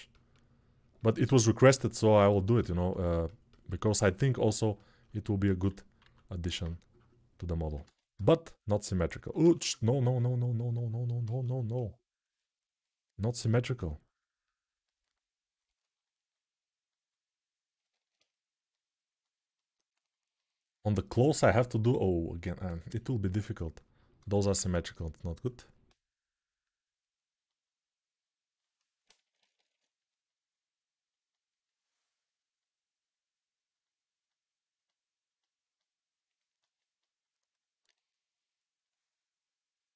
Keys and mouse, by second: 5.2 alt+q, 5.9 alt+q, 7.6 ctrl+z, 7.9 x, 9.2 ctrl+z, 9.3 ctrl+z, 11.5 ctrl+z, 13.2 right click, 17.7 alt+q, 24.0 ctrl+z, 24.2 ctrl+z, 25.2 click, 29.0 [.